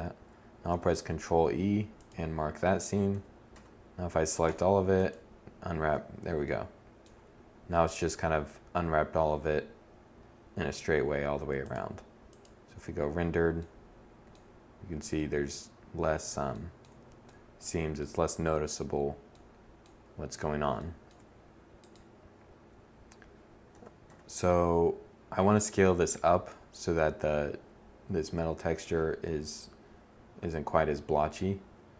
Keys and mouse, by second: 2.0 a, 2.4 a, 3.3 u, 22.5 a, 22.9 a.